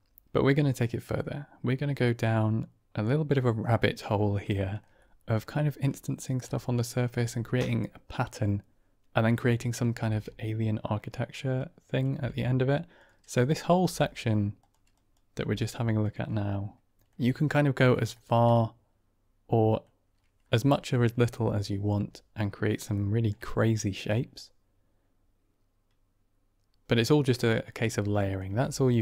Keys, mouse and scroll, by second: 4.5 shift+middle drag, 4.9-5.2 drag, 6.4-6.8 drag, 9.9 ctrl+space, 11.6-12.0 drag, 12.0 g, 13.3 click, 13.7 g, 14.8 click, 15.3 g, 16.9 middle click, 18.0 shift+drag, 18.4-19.5 drag, 19.5 middle click, 22.8-23.2 middle drag, 24.3-26.8 middle drag, 27.4 middle click, 28.1 drag, 28.4 g.